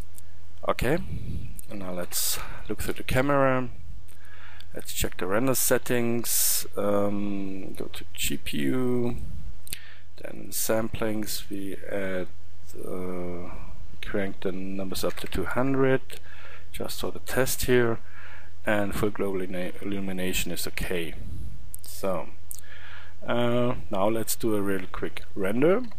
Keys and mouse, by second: 2.1 KP_0, 9.4-22.1 middle drag, 22.1 click.